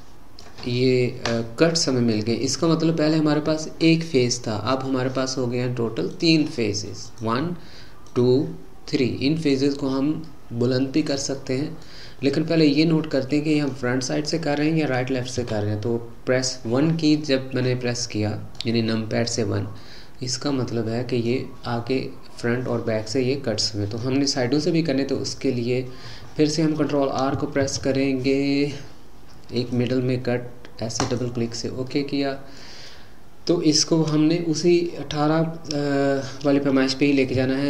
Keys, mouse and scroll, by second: 6.1-7.2 drag, 8.1 click, 9.4 click, 10.3-15.3 middle drag, 15.3 KP_1, 17.1-22.0 middle drag, 27.6 ctrl+r, 31.9-35.0 middle drag, 37.3 g.